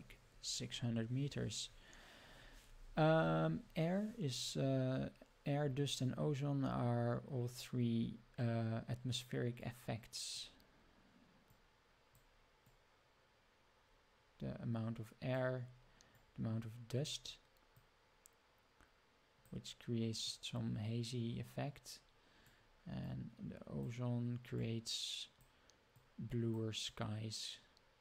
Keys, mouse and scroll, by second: 9.6 click, 11.5 click, 12.6-15.4 drag, 16.1 click, 17.7-19.5 drag, 20.3-22.5 drag, 23.1 click, 24.6 click, 25.9 click, 26.8-28.0 drag.